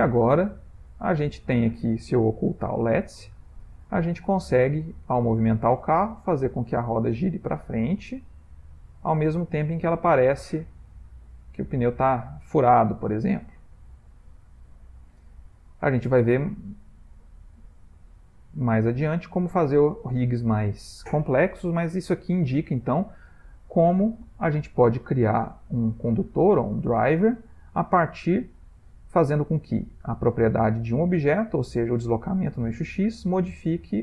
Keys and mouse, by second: 0.2 Tab, 0.5 middle click, 3.0 h, 3.8 click, 4.1 shift+middle click, 5.1 click, 5.1 shift+middle click, 10.5 shift+middle click, 11.4 middle click, 12.1 middle click, 12.4 ctrl+middle click, 13.1 shift+middle click, 14.1 middle click, 14.2 middle click, 15.2 click, 21.4 middle click, 22.9 middle click, 24.2 click, 29.9 click, 31.3 click, 33.4 click.